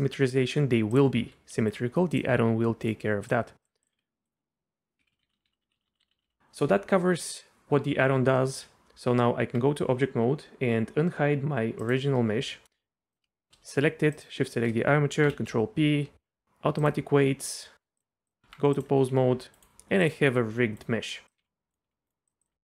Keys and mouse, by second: 0.9 click, 1.2 r, 2.4 r, 3.6 click, 3.9 r, 5.0 ctrl+z, 5.1 ctrl+z, 5.2 ctrl+z, 5.3 ctrl+z, 5.5 ctrl+z, 5.6 ctrl+z, 5.7 ctrl+z, 5.9 ctrl+z, 6.0 ctrl+z, 6.1 ctrl+z, 6.2 ctrl+z, 8.6 Tab, 11.8 click, 12.5 middle click, 14.1 shift+click, 15.2 ctrl+p, 18.4 Tab, 18.8 drag, 19.0 r, 20.3 r, 20.8 click, 21.7 click, 21.7 r, 21.9 r, 22.3 click.